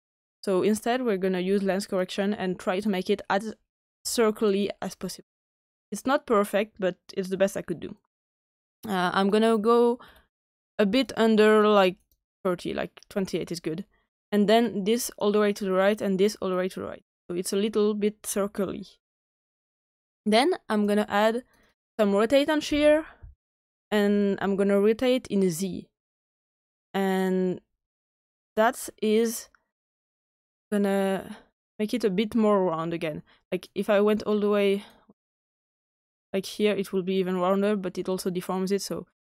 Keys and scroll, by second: 22.6-23.5 typing.